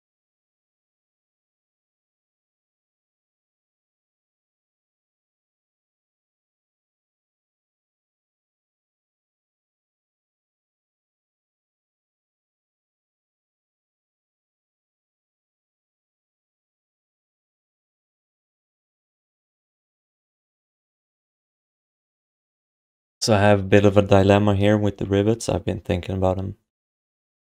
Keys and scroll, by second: 2.4 q, 3.3 alt+shift+d, 3.6 ctrl+s, 9.0 alt+shift+d, 9.3 ctrl+s, 13.0 ctrl+s.